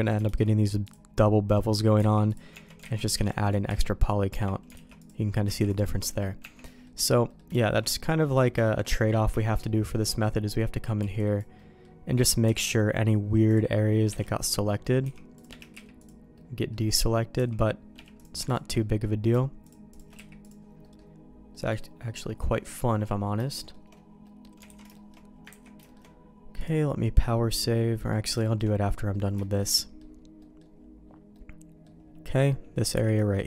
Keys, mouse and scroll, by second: 0.2 alt+v, 2.3 alt+v, 2.5 Tab, 2.9 alt+a, 3.1 b, 3.5 click, 3.5 middle click, 3.5 right click, 4.0 q, 4.3 Tab, 4.9 alt+v, 5.7 alt+v, 6.4 Tab, 6.6 middle click, 7.2 middle click, 7.5 shift+middle click, 7.9 middle click, 8.2 middle click, 8.6 shift+middle click, 8.9 middle click, 9.3 shift+middle click, 9.6 middle click, 10.9 b, 11.5 right click, 11.6 middle click, 12.4 c, 14.2 middle click, 15.0 c, 15.7 q, 16.3 middle click, 17.3 c, 18.1 click, 18.4 shift+click, 18.7 middle click, 19.6 click, 20.1 q, 20.8 middle click, 21.5 middle click, 22.0 middle click, 22.6 middle click, 23.4 shift+middle click, 24.2 middle click, 24.6 alt+a, 24.9 middle click, 25.5 ctrl+s, 25.8 shift+middle click, 26.5 click, 27.2 middle click, 28.0 middle click, 28.4 shift+middle click, 29.1 middle click, 29.3 shift+middle click, 29.7 middle click, 30.3 middle click, 31.3 middle click, 32.9 b.